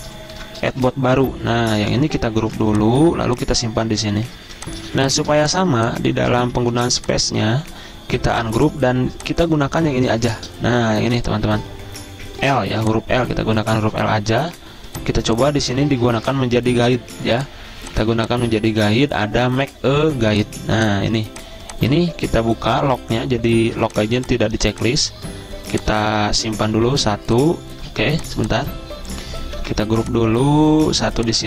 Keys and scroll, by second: 0.7 v, 2.2 v, 2.8 ctrl+g, 4.8 z, 6.3-8.1 typing, 10.5 space, 13.0 z, 28.3 ctrl+z, 29.9 ctrl+g.